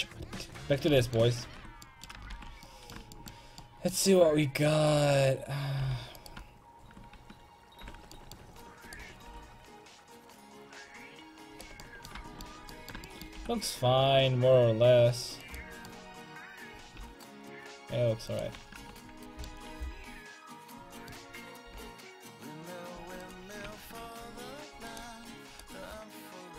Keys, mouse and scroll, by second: 0.9 middle click, 1.4 ctrl+Tab, 2.6 alt+z, 4.8 click, 5.9 g, 7.7 ctrl+j, 9.3 r, 11.8-13.4 middle drag, 13.4 r, 15.6 right click, 16.2-20.0 drag, 16.8 r, 17.0 r, 18.8 ctrl+Tab, 21.8 ctrl+z, 22.2 ctrl+z, 22.3 ctrl+z, 22.5 ctrl+z, 23.3 click, 23.9 ctrl+Tab.